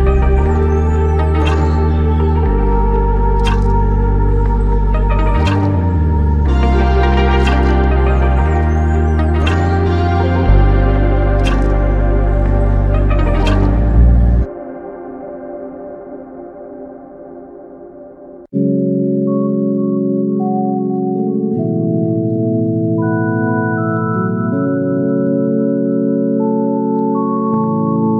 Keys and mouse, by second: 5.2 ctrl+click, 6.9 typing, 8.4-9.6 typing, 11.9 double click, 15.1 double click.